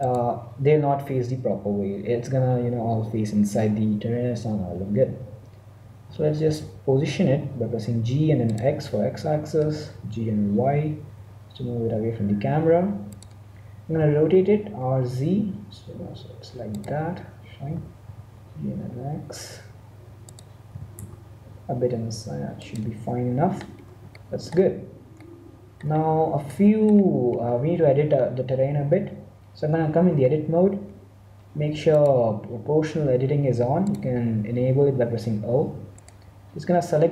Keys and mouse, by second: 0.0 click, 0.1 middle click, 6.0 g, 9.6 g, 13.8 r, 17.6 g, 20.6 g, 23.5-28.8 middle drag, 28.8 Tab, 31.8-33.5 drag, 35.9-37.1 right drag.